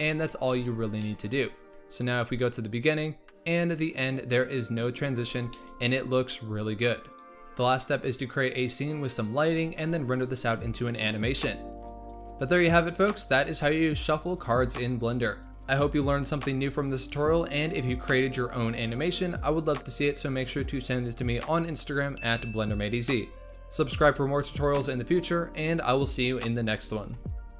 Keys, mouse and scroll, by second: 0.1-0.8 shift+middle drag, 0.8 scroll down 2, 1.0-2.6 middle drag, 2.6-5.1 drag, 5.1-5.5 scroll up 2, 5.5 shift+middle click, 6.0 scroll up 2, 7.2 click, 7.4 scroll down 1, 7.6 scroll up 3, 7.6-9.1 typing, 7.9 shift+middle click, 8.6-9.1 scroll up 18, 9.0 shift+middle click, 9.7-10.2 scroll down 14, 9.8 middle click, 10.0 middle click, 10.1 middle click, 10.2 ctrl+alt+KP_0, 10.5 click, 10.5-10.9 scroll up 4, 10.6-12.3 typing, 11.0 scroll down 3, 11.3 ctrl+z, 12.2 scroll up 1, 12.9 click, 13.1 click, 13.3 scroll up 3, 13.8 shift+a, 13.9 scroll down 3, 14.0 s, 14.7 click, 15.2 scroll up 3, 15.3 shift+middle click, 15.4 z, 15.9 click, 16.9 click, 17.4 scroll down 2, 17.5 scroll up 1, 17.7 click, 17.8 click, 18.2-18.8 scroll down 20, 18.2 middle click, 18.8 click, 18.9-20.8 typing, 19.3 scroll up 2, 20.1 middle click, 20.7 click, 21.0-21.5 scroll up 3, 21.1 click, 21.5 click, 22.2 click, 22.6-23.1 drag, 24.4 middle click, 24.6 scroll down 8, 24.7 click, 25.0 click, 25.3 KP_0, 25.5 scroll up 1, 25.7 click, 25.9 click, 26.7 click.